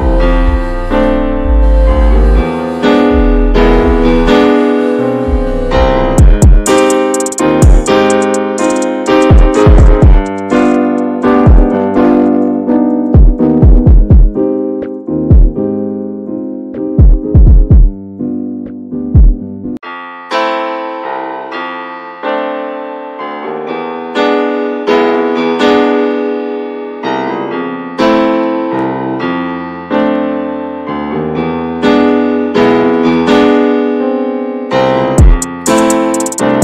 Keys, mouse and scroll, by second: 0.2-3.0 middle drag, 3.0-4.0 scroll up 1, 4.0 2, 4.4 click, 5.0 alt+shift+click, 5.6 middle click, 6.5-8.0 middle drag, 8.0 alt+shift+click, 8.4 alt+shift+click, 9.7 scroll down 2, 9.9-11.2 middle drag, 11.2 alt+z, 11.6-12.8 shift+middle drag, 12.8 alt+shift+click, 13.6 middle click, 14.4-15.0 shift+scroll up 2, 15.0 alt+shift+click, 15.4 scroll down 2, 15.6 middle click, 16.4 alt+shift+click, 16.8-18.1 middle drag, 18.1 right click, 18.5 a, 19.2 a, 19.9 right click, 20.3-20.8 scroll up 1, 21.2-22.3 alt+shift+drag, 22.3 x, 22.8 scroll down 3, 23.0-24.2 middle drag, 24.2 shift+scroll up 1, 24.5 middle click, 25.1 Tab, 25.5 Tab, 26.1 alt+middle click, 26.6 alt+z, 26.7 Tab, 27.1 Tab, 27.6 alt+z, 27.8 alt+z, 28.3 click, 29.0 scroll up 2, 29.8 1, 31.1 click, 32.2 s, 33.5 s.